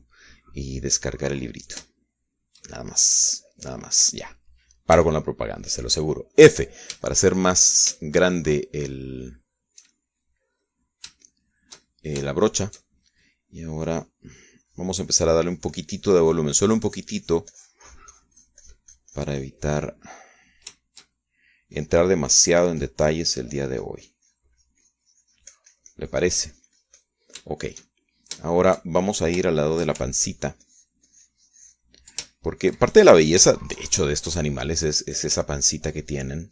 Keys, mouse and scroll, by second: 3.6 shift+middle click, 4.8-6.5 middle drag, 6.5 f, 7.9 click, 8.6 shift+middle click, 9.6-14.4 shift+middle drag, 12.7-14.4 shift+drag, 15.4 click, 15.9-22.0 drag, 22.4 shift+middle click, 23.3-28.8 shift+drag, 29.0 shift+middle click, 30.0 shift+middle click, 30.6 shift+middle click, 31.8-33.8 ctrl+shift+drag, 33.9-34.9 ctrl+shift+drag, 35.0-36.5 shift+middle drag.